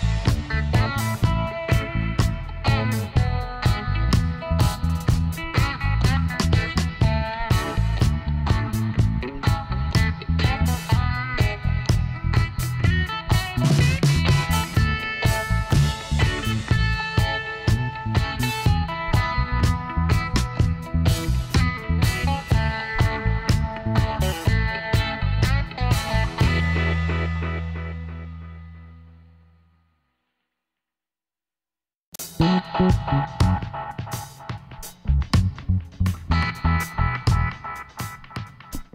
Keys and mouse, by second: 1.9 ctrl+n, 3.4 Tab, 3.8 a, 4.1 middle click, 4.4 middle click, 5.5 Tab, 7.2 KP_7, 10.5-12.0 middle drag, 12.0-13.9 drag, 12.0-15.1 right drag, 13.9 e, 15.2-17.0 drag, 18.7-21.5 right drag, 20.7 s, 23.5-25.2 drag, 26.2 ctrl+r, 27.3 middle click, 28.5 s, 31.0-33.3 middle drag, 33.3-36.9 drag, 33.7 e, 38.2-38.9 drag.